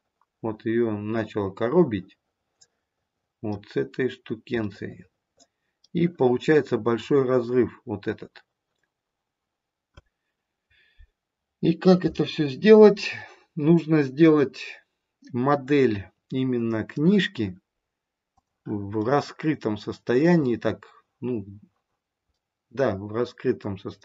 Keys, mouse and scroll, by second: 3.8-4.6 scroll down 1, 4.6 middle click, 7.1 scroll up 1, 14.4 middle click, 18.9 middle click, 22.3 middle click.